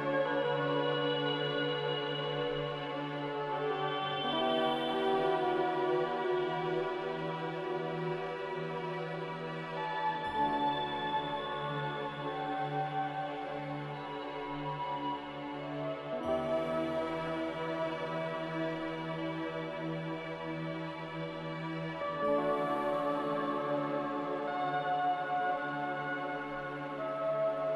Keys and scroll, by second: 4.8 m, 7.9 g, 8.9 x, 12.5 g, 13.9 z, 16.0 a, 18.2 x, 21.4 g, 22.9 z, 24.6 a, 27.2 m.